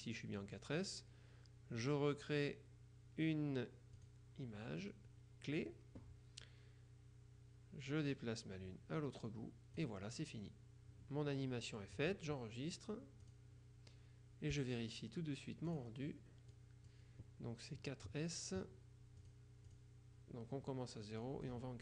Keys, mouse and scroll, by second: 4.1 click, 8.2-10.3 drag, 13.3 click, 15.7 click, 16.6 click, 19.3-20.3 drag, 21.3 click.